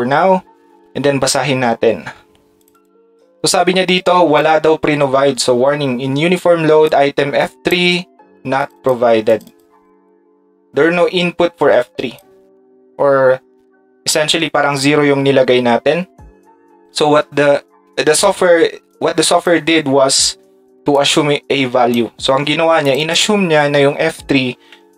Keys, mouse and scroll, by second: 2.6 click, 2.7 click, 4.4 click, 11.8 click, 18.9-20.2 drag, 24.7 Tab.